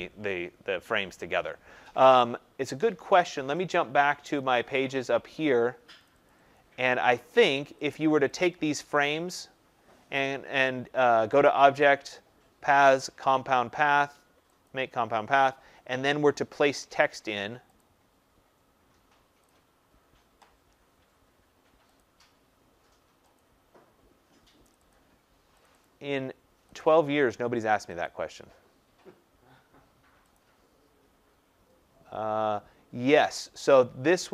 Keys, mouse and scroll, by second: 4.3 click, 6.0 click, 6.2 click, 7.8 click, 8.9 click, 14.6 click, 17.7 click, 19.5 click, 22.0 click, 23.3 click, 24.7 click, 24.9 click, 25.6 click, 25.8 click, 26.7 click, 28.0 click, 30.3 click.